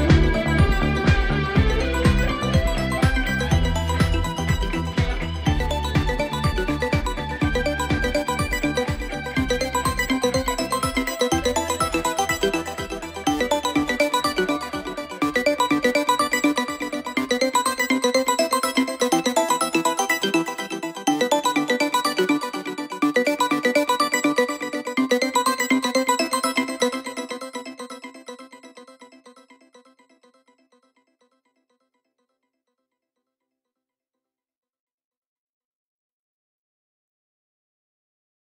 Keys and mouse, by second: 0.4 middle click, 2.4 middle click, 3.3 middle click, 4.3 middle click, 5.0 middle click, 15.8 middle click, 16.3 middle click, 17.4 middle click, 18.2 middle click, 18.7 middle click, 19.3 middle click, 20.3 middle click, 22.6 middle click, 22.9 middle click, 25.0 middle click, 25.6 middle click, 25.8 middle click, 27.1 middle click, 30.2 middle click, 31.9 middle click, 34.0 middle click, 34.5 middle click.